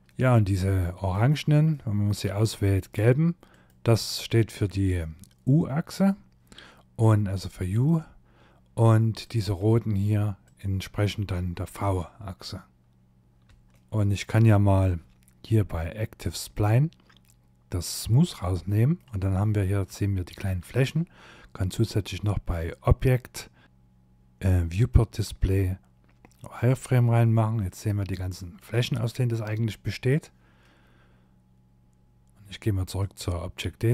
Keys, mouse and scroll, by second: 0.1 click, 0.7 shift+middle click, 1.6 click, 2.5 shift+click, 6.1 middle click, 8.2 click, 9.4 shift+click, 13.2 click, 13.2 shift+middle click, 13.4 scroll up 1, 15.4 click, 17.0 click, 17.6 middle click, 18.2-18.5 scroll up 5, 18.9 shift+middle click, 20.9 click, 23.8 click, 25.6 click, 26.4 scroll down 2, 26.8 middle click, 27.6 shift+middle click, 28.6 middle click, 32.0 click.